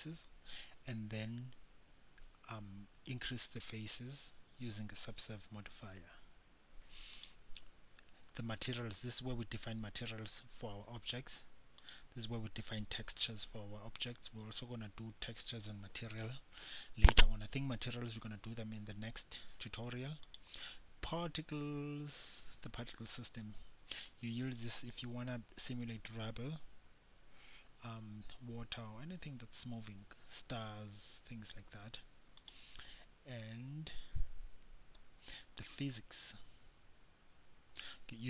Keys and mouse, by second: 10.4-12.0 middle drag, 13.9-20.4 middle drag, 20.4-38.2 drag.